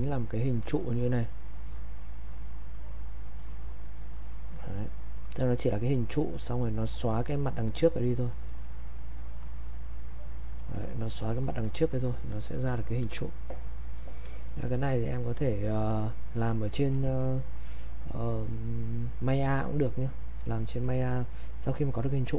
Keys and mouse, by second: 8.3 click.